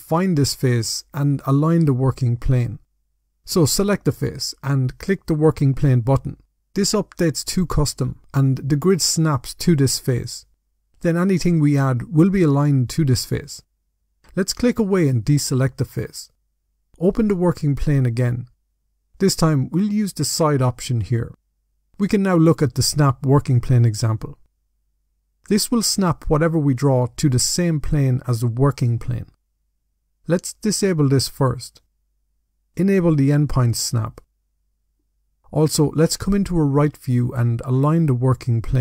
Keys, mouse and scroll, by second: 3.6 click, 5.4 click, 8.4 middle click, 14.6 click, 17.6 click, 20.6 click, 22.0-22.4 scroll down 3, 22.4 middle click, 23.6 middle click, 24.9 middle click, 27.2 middle click, 30.7 click, 33.2 click, 33.8 click, 34.2 click, 37.2 click.